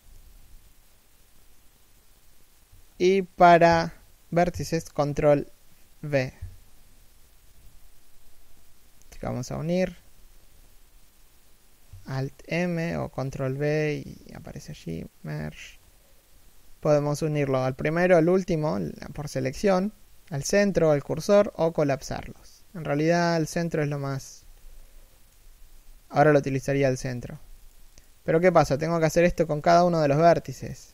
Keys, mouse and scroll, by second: 24.1 z, 24.5 middle click, 25.1 z, 26.1 z, 26.7 middle click, 27.1 z, 27.3 right click, 28.6 alt+m, 29.4 z, 29.8 middle click.